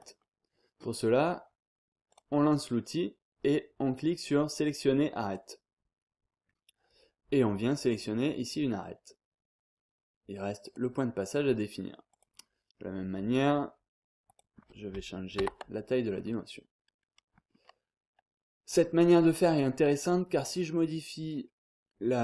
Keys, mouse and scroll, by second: 0.0 click, 2.1 click, 5.2 click, 7.9 click, 10.6 click, 12.1 click, 14.2 click, 15.4 5, 17.0-17.5 scroll up 2, 17.5-17.9 scroll down 2, 17.9-18.4 scroll up 2, 18.4 scroll down 2, 18.7-19.2 scroll up 2, 19.3-19.7 scroll down 1, 19.7-20.3 scroll up 1, 21.9-22.2 scroll down 1.